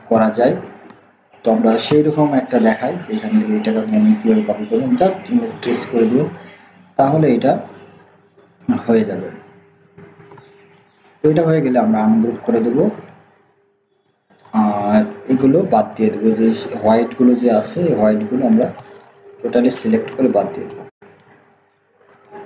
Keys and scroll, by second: 0.1 ctrl+v.